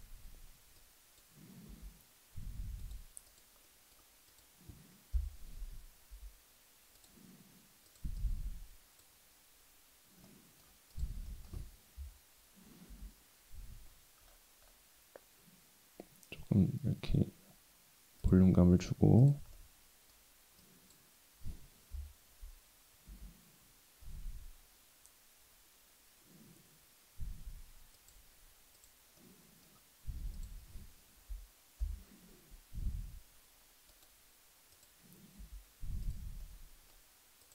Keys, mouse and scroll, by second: 0.8 click, 1.7 g, 3.3 click, 3.6 middle click, 4.3 click, 5.1 KP_7, 6.1 g, 7.9 click, 8.2-9.0 drag, 10.2 middle click, 10.9 click, 11.3 middle click, 12.0 KP_7, 12.9 g, 19.2 click, 19.6 middle click, 20.6 click, 21.9 KP_7, 23.1 g, 28.7 click, 29.2 middle click, 30.3 click, 31.8 KP_7, 32.8 g, 34.7 click, 35.4 g, 36.4 middle click, 37.4 click.